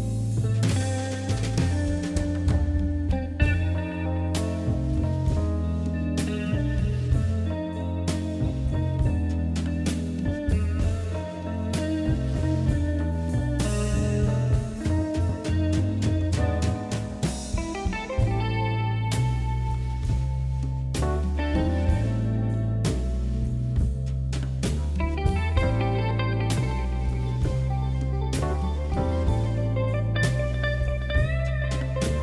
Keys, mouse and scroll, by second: 1.5-1.8 scroll down 2, 1.8 scroll up 4, 2.5 shift+middle click, 2.8-3.5 scroll up 1, 3.5 ctrl+r, 5.0 3, 5.2 click, 5.8 KP_3, 6.6 e, 10.0 r, 10.7 e, 11.4 g, 12.3 r, 12.5 scroll down 1, 12.7-13.9 shift+middle drag, 13.9 r, 14.6 g, 15.5 e, 17.2 KP_1, 17.7 scroll up 3, 18.2 s, 19.2 ctrl+KP_Add, 20.2 s, 22.8 ctrl+KP_Subtract, 23.4 KP_3, 24.2 g, 26.3 e, 27.6 s, 28.4 KP_1, 29.6 KP_3, 30.2 g, 31.4-32.0 scroll down 3, 32.0 Tab.